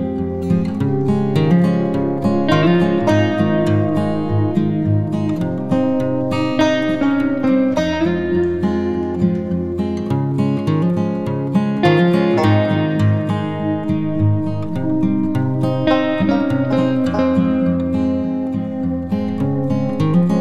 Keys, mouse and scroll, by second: 11.2 scroll down 2, 13.1 click, 13.6 scroll up 2, 14.2-15.4 scroll down 2, 15.4 click.